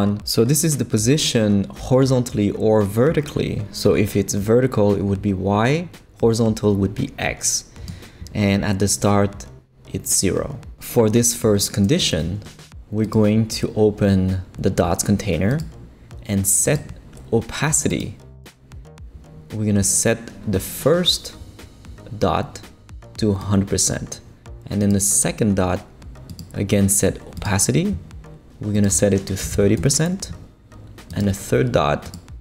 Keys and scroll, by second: 29.2-30.0 typing.